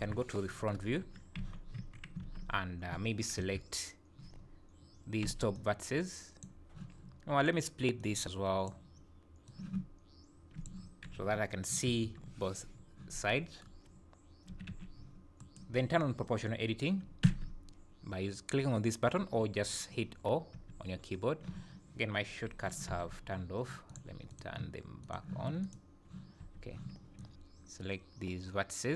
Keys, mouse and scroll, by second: 25.6 click, 26.4 n, 27.2 click.